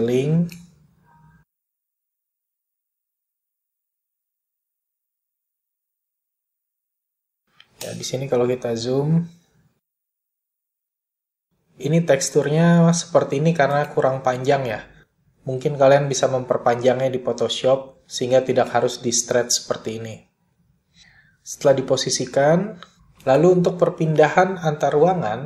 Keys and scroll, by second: 4.2 r, 8.3 ., 17.4 s.